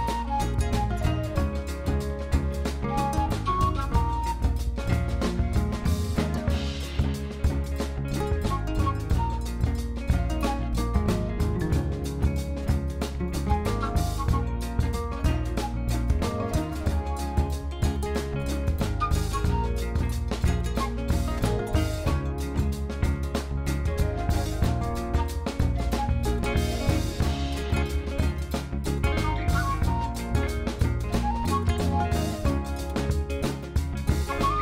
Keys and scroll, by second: 0.3 s, 1.6 shift+z, 4.6 r, 9.2 s, 9.6 shift+z, 13.4 shift+z, 14.5 shift+z, 19.3 Tab, 22.3 shift+s, 27.3 shift+z, 29.9 shift+d, 30.2 r, 32.1 shift+r.